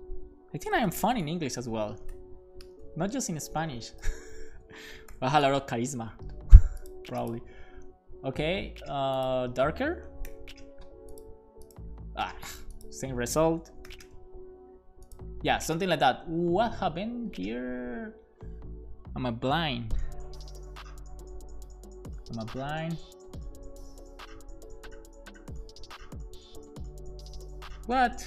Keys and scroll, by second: 0.5-3.8 typing, 4.5 super+s, 5.1 alt+shift+f, 5.4 super+s, 10.4 super+s, 13.6 BackSpace, 14.0 super+s.